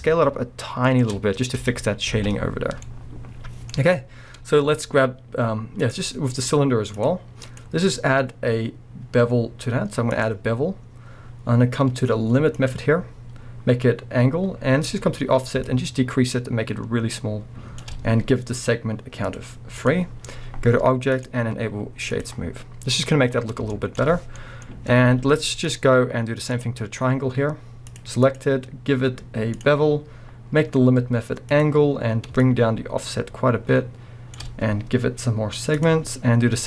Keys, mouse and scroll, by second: 1.5 Tab, 2.2 alt+a, 2.2 scroll down 1, 2.8-5.8 middle drag, 3.8-4.2 scroll down 2, 4.2-5.8 scroll up 2, 5.8 click, 6.9 click, 7.5-12.7 drag, 10.6-12.6 scroll up 2, 15.6-23.7 shift+drag, 22.6-23.1 scroll down 2, 23.1-23.7 scroll up 2, 23.7-26.5 shift+middle drag, 25.0 z, 26.0-26.5 scroll up 2, 26.5 click, 27.9 click, 28.3-31.6 drag, 32.4-36.6 shift+drag, 36.2-36.6 scroll up 1.